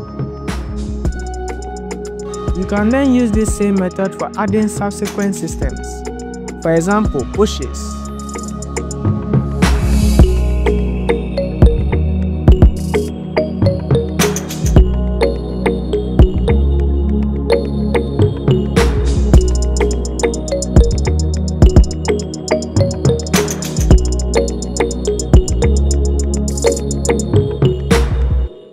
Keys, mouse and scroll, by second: 0.2 click, 4.2 drag, 5.7 click, 8.2 click, 8.3 scroll up 4, 8.4 click, 8.5 click, 8.6 click, 9.1-9.6 scroll down 8, 9.3 click, 10.0 click, 10.1 click, 11.9 click, 12.4 click, 12.9 KP_7, 12.9 KP_8, 13.0 scroll up 5, 13.1 click, 13.2 click, 13.3 click, 13.6-14.4 scroll down 14, 13.9 click, 14.3 scroll up 6, 14.4 click, 14.6 click, 14.7 scroll down 5, 15.4 click, 15.6 click, 15.6 scroll down 3, 15.7 click, 15.9 KP_5, 16.2-16.8 scroll up 3, 16.3 shift+click, 18.5 click, 20.8 click, 24.3 click, 24.4 scroll down 7, 25.6 click, 25.9 scroll up 4, 27.6 click, 28.2 click, 28.5 click, 28.6 click.